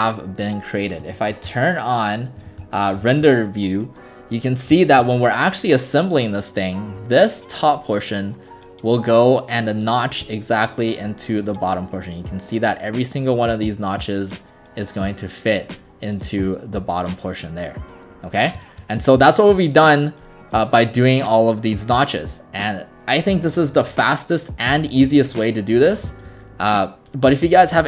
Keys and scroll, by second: 1.3 ctrl+alt+r, 2.5 alt+r.